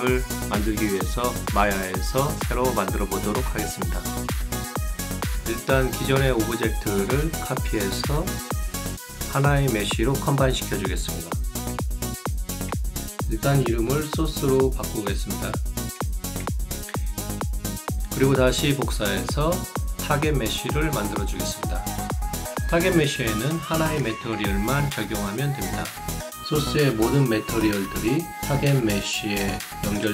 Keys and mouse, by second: 2.6 click, 4.1 click, 8.8 click, 9.8 click, 10.7 click, 13.8 click, 14.2 click, 17.0 click, 17.9 BackSpace, 20.8 ctrl+d, 21.1 ctrl+click, 21.4 ctrl+click, 22.3 ctrl+a, 22.8 ctrl+g, 23.7 ctrl+right click, 27.3 ctrl+click, 28.7 ctrl+click.